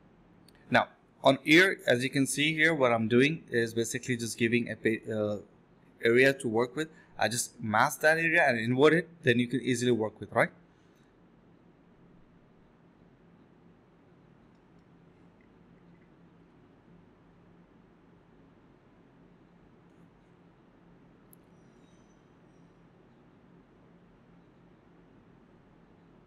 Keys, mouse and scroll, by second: 0.1 f, 0.9 ctrl+click, 1.6 ctrl+click, 3.0 ctrl+click, 3.9 ctrl+click, 10.0 ctrl+z, 10.4 ctrl+click, 11.6 double click, 12.2 alt+click, 12.4 ctrl+click, 12.5 alt+click, 12.8 alt+click, 12.9 alt+double click, 13.1 alt+double click, 17.2-18.2 typing, 20.4 typing, 26.2 alt+right click.